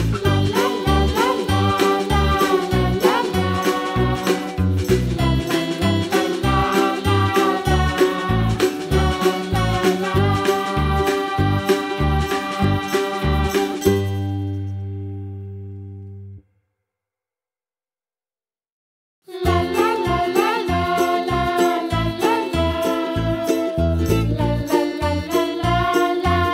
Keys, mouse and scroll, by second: 0.6 g, 0.8-1.4 scroll down 10, 1.4 shift+a, 3.9-4.7 scroll up 1, 4.8 KP_Decimal, 5.1-5.6 scroll down 7, 5.6-6.3 middle drag, 6.3 s, 8.3-8.6 middle drag, 8.6-9.0 scroll up 2, 9.0-10.1 middle drag, 10.1 Tab, 10.6 ctrl+r, 13.0 ctrl+r, 13.8 middle click, 14.7 Tab, 15.2 s, 16.4 KP_Decimal, 16.7-17.3 middle drag, 17.3 scroll up 1, 17.6 s, 18.8 s, 19.9-20.6 middle drag, 20.6 click, 21.2 Tab, 21.5 click, 22.0 3, 22.1 click, 22.5 shift+click, 22.9 shift+click, 23.5 |.